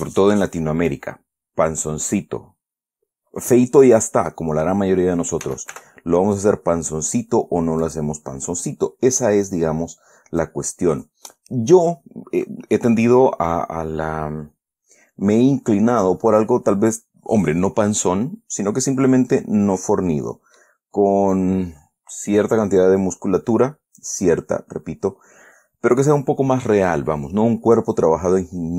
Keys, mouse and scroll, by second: 1.2-5.2 drag, 5.8 s, 6.1 y, 8.2 click, 9.0-10.0 drag, 10.8-11.9 drag, 18.8-19.4 scroll down 1, 19.4-21.1 drag, 21.3-21.9 scroll up 1, 23.3-23.9 scroll down 2, 23.9 scroll up 2, 24.2-24.5 scroll down 2, 24.5 scroll up 2, 24.7-26.8 scroll down 2.